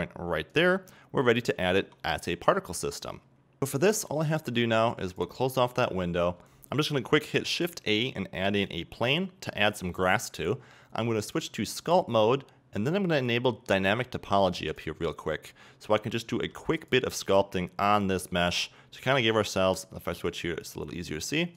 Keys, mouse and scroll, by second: 0.8 middle click, 1.8 Tab, 2.1-2.5 scroll down 2, 2.5-4.7 middle drag, 4.7-6.4 drag, 5.7 scroll down 1, 6.4 scroll up 1, 8.7 shift+a, 8.9 s, 10.1 click, 16.9 click.